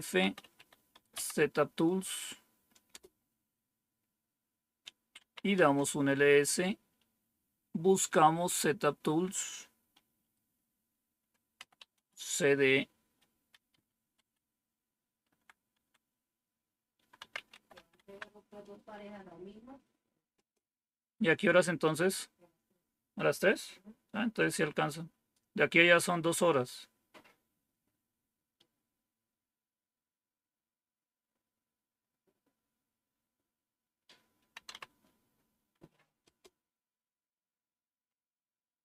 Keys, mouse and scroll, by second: 0.3-1.0 typing, 2.6-3.3 typing, 5.1 typing, 5.5 Tab, 11.2-12.2 typing, 13.6 Up, 14.0 Up, 15.2 Down, 15.6 Down, 16.8-18.1 typing, 20.2 Tab, 34.2-35.0 typing, 36.1 Return.